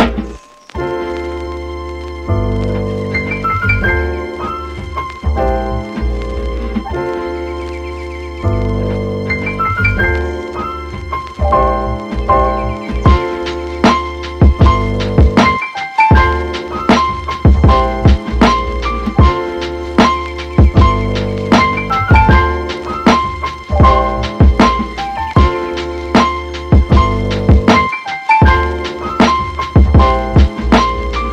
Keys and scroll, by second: 22.1 super+z, 25.6 space, 28.8 super+z.